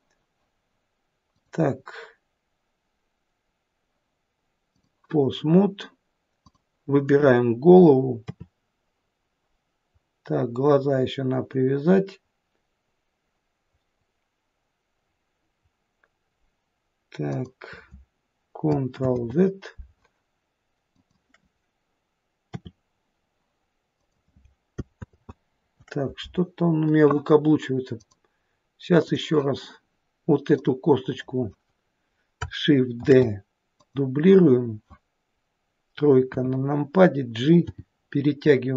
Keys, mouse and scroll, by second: 1.3 click, 6.4 click, 8.3 r, 19.1 ctrl+z, 20.9 click, 22.6 r, 25.1 ctrl+z, 28.0 click, 30.5 click, 33.1 shift+d, 36.3 KP_3, 37.8 g.